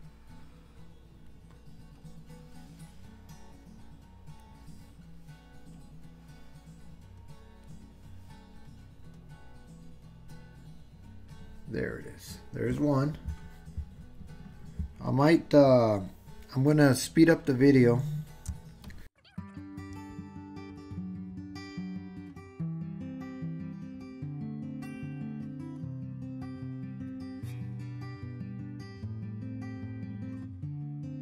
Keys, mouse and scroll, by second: 2.0-4.5 drag, 5.8-7.7 drag, 9.0-11.3 drag, 18.8 shift+middle click, 19.4 click, 20.3 click, 20.8 click, 21.0 click, 21.5 click, 21.8 click, 22.7 click, 23.3 click, 23.7 click, 24.4 shift+click, 24.8 click, 25.2 click, 25.2 click, 25.6-26.8 drag, 26.9 click, 27.7 shift+click, 28.1 click, 28.4 click, 28.6 click, 29.1 super+z, 29.3 click, 30.6 click, 31.0 click.